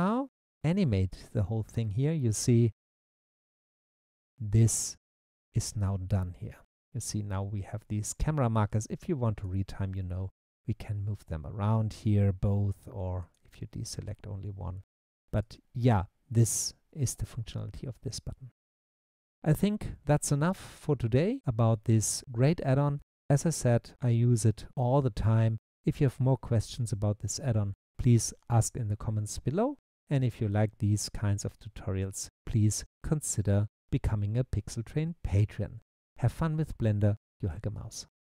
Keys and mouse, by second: 0.1 click, 10.8 click, 13.2 click, 15.4 click.